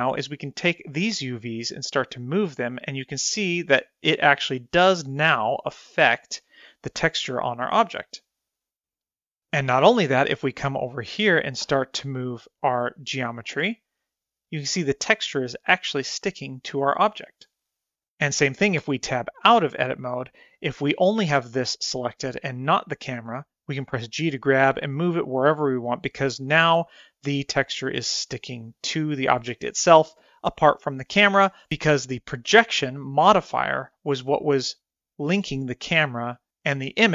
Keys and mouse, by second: 1.0 click, 2.3 g, 12.3 1, 13.3 click, 14.0 g, 16.5 click, 16.7 g, 19.5 Tab, 20.7-21.2 middle drag, 24.6 g, 31.6 drag, 32.4 click, 34.6 click.